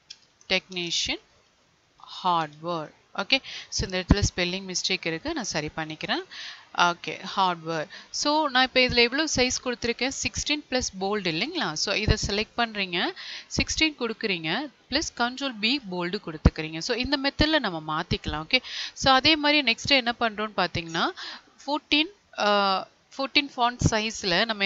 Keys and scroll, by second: 0.8 space, 15.4 ctrl+b.